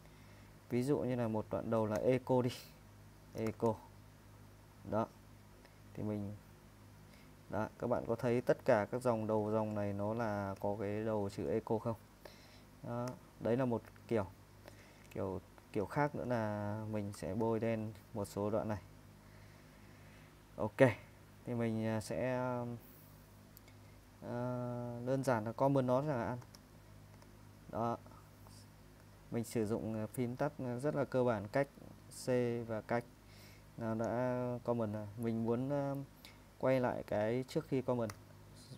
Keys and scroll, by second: 2.0-4.2 typing, 6.3 Escape, 7.5-11.4 typing, 13.1-20.0 typing, 26.4-27.1 typing, 38.1 u.